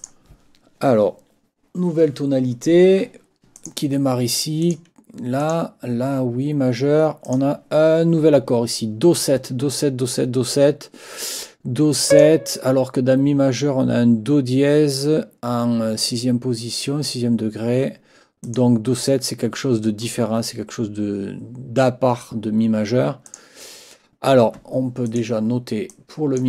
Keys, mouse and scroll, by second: 0.0 click, 3.6 click, 4.6 click, 5.4 click, 7.2 click, 12.1 click, 18.4 click, 23.2 click, 25.0 click, 25.9 click.